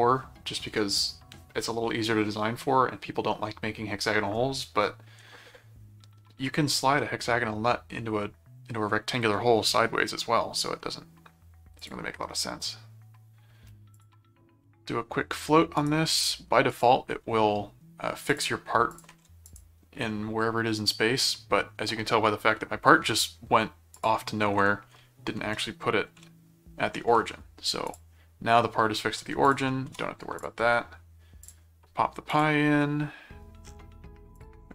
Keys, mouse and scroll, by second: 11.8 click, 13.9 click, 15.3 scroll up 2, 15.8 right click, 16.7 click, 18.3 ctrl+click, 18.9 ctrl+click, 23.9 click, 26.1 ctrl+7, 27.9 click, 29.4 shift+click, 29.9 shift+c, 30.4 click, 31.4 click, 32.3 click, 34.4 click.